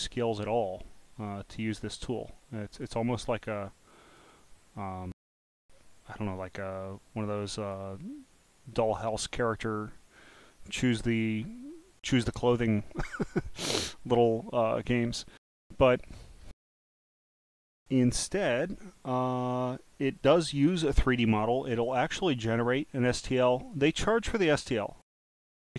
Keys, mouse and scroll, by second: 0.1-0.5 scroll up 1, 2.4 click, 3.2-3.7 scroll up 6, 3.9 click, 7.4 click, 12.3 click, 13.6-14.6 scroll down 3, 14.6 click, 20.2 click, 23.5 click, 25.1 click.